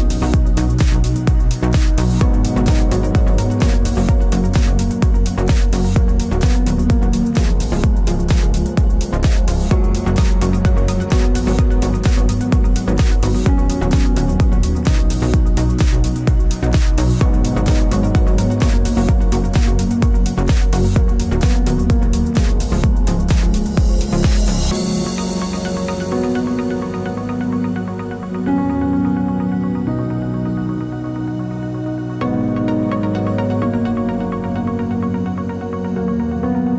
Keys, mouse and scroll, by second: 0.5-1.5 drag, 0.5 g, 2.3 e, 2.8 click, 3.1 middle drag, 3.3-6.0 middle drag, 6.0 click, 6.3 alt+d, 7.1 click, 7.1 s, 7.5 s, 8.0-8.9 middle drag, 8.3 g, 8.9 click, 9.0-10.0 middle drag, 9.2 shift+Tab, 9.6 g, 10.0 click, 10.5 alt+d, 11.3 click, 11.4 s, 11.8 click, 11.9 g, 12.8 Escape, 13.0 s, 13.6 click, 13.7 g, 14.1 click, 14.5 alt+d, 15.3 click, 15.4 alt+d, 16.2 click, 16.3 middle click, 16.4 scroll, 16.6 click, 16.7-18.6 middle drag, 18.6 click, 18.9 scroll up 1, 19.2 scroll down 1, 19.4 alt+d, 19.7 click, 20.0 middle click, 20.3 scroll up 1, 20.4 s, 20.9 click, 21.0 scroll down 1, 21.1 middle click, 21.3 s, 21.7 click, 22.3 click, 22.4 s, 22.9 click, 23.0 s, 23.5 click, 23.6 g, 24.1 click, 24.9 click, 25.0 middle click, 25.2 click, 25.3-25.6 scroll down 1, 25.6-26.8 middle drag, 26.8 click, 27.6 scroll up 1, 27.9 middle click, 28.2 alt+d, 28.6 click, 28.8 alt+d, 28.8-32.3 middle drag, 32.3 click, 32.5 alt+d, 33.9 click, 34.0-35.4 shift+middle drag, 35.4 click, 35.6 alt+d, 36.0 middle click, 36.3 scroll down 2.